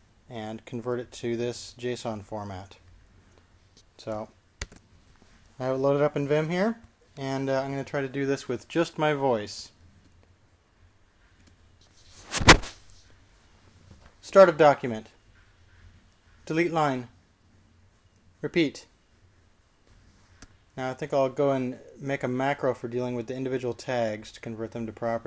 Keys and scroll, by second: 5.3 n, 15.8 typing, 17.6-18.4 typing, 19.7 ..